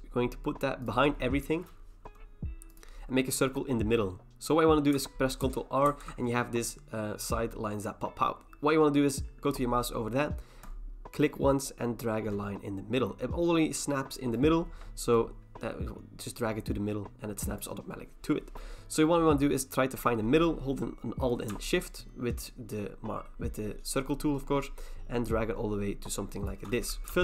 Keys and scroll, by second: 5.4 ctrl+r, 5.9 ctrl+r.